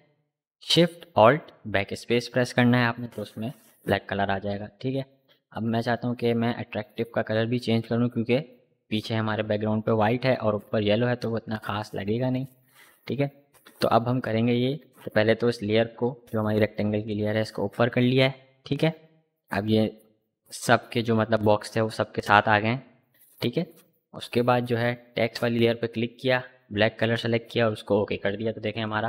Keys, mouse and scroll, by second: 5.4 click, 10.3 click, 13.3-16.5 drag, 17.3 click, 22.5-26.4 drag.